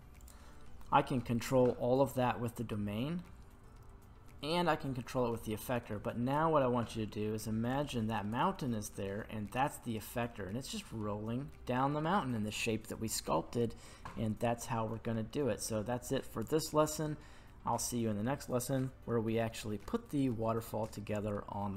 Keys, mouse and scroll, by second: 5.9-6.9 middle drag, 7.2-7.8 scroll up 2, 7.8-8.3 shift+middle drag, 13.2 scroll up 1, 13.3-14.0 middle drag, 14.1-16.4 scroll down 1.